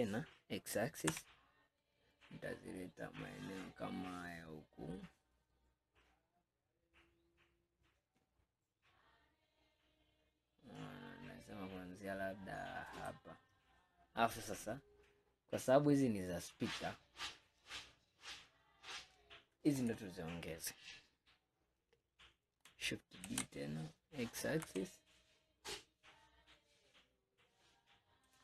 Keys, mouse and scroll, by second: 19.8 click, 23.3 shift+d.